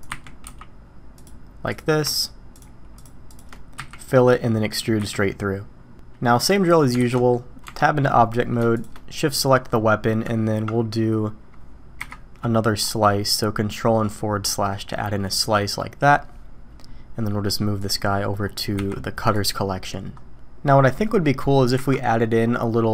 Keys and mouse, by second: 0.1 e, 2.1 shift+click, 3.8 f, 4.1-4.7 drag, 5.0 e, 6.5 click, 7.0 alt+a, 7.1 drag, 7.6 Tab, 8.2 middle drag, 13.2-14.4 drag, 14.9-16.1 drag, 17.8 click, 18.7 m, 20.7 click, 21.8 KP_1.